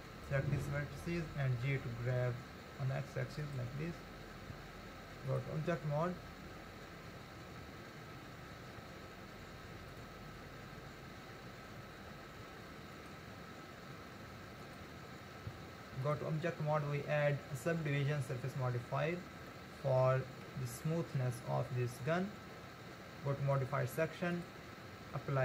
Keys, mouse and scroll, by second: 1.7 g, 4.5 Tab, 5.9-6.8 scroll down 2, 7.0-7.8 scroll down 2, 7.8-8.8 scroll up 4, 8.8 Tab, 11.5 ctrl+r, 15.5 Tab, 16.4-17.0 scroll down 7, 19.5-21.4 middle drag, 21.4-23.6 scroll up 4, 23.6 click.